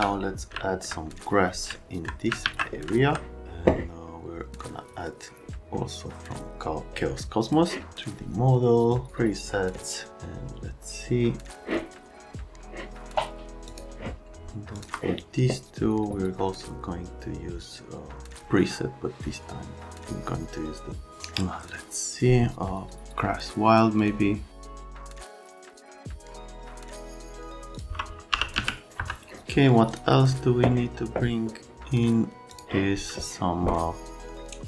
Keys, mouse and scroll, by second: 0.5 alt+middle click, 1.7 alt+middle click, 2.4 alt+q, 2.9 middle click, 7.4 click, 13.6 click, 14.7 click, 24.0 click, 27.7 click, 28.3 r, 28.6 z, 28.9 F3, 29.8 click, 32.5 click.